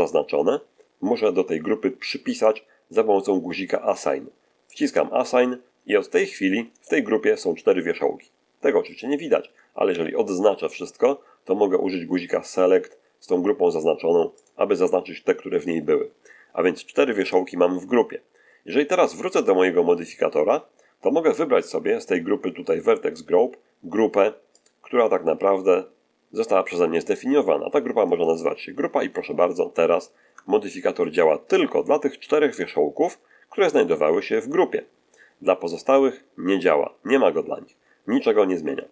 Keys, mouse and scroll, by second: 4.6 click, 9.8 a, 14.3 click, 19.3 click, 24.5 click, 28.0 click, 30.2 Tab, 33.8-38.9 middle drag.